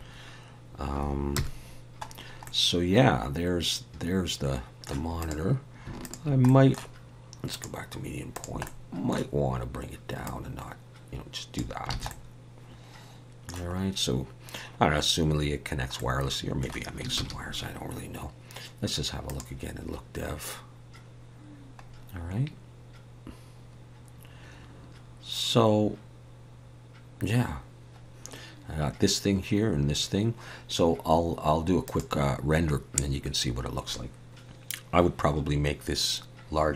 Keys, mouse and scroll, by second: 1.3 KP_0, 2.3 scroll down 1, 2.5 middle click, 5.2 click, 6.0 shift+click, 6.5 middle click, 7.5 click, 8.6 middle click, 10.2 click, 11.9 alt+a, 12.1 middle click, 13.9-14.5 scroll down 1, 16.0 middle click, 17.2 ctrl+s, 19.6 click, 22.3-22.7 scroll up 2, 26.8 scroll down 1, 32.2 click.